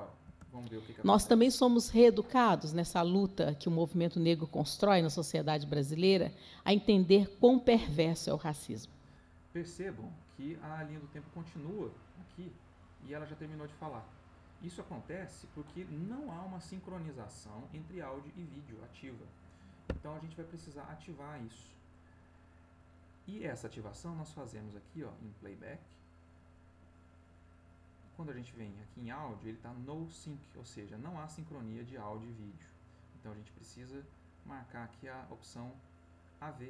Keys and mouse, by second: 0.2 space, 19.8 Escape, 26.2 click, 32.5 click.